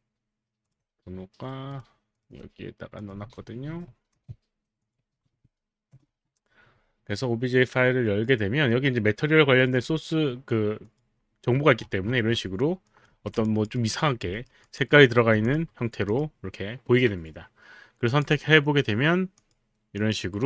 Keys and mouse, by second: 0.7 alt+click, 1.7 click, 2.2 click, 2.9 click, 4.1 ctrl+c, 4.8 click, 5.8 ctrl+v, 5.9 Return, 9.6 click, 10.8 click, 12.9 click, 13.1 f, 13.4 alt+click, 13.8 alt+right click, 14.6 alt+middle click, 14.6 alt+right click, 14.6 alt+click, 14.9 alt+right click, 15.4 click, 16.1 click, 18.0 click, 19.4 click, 20.0 click.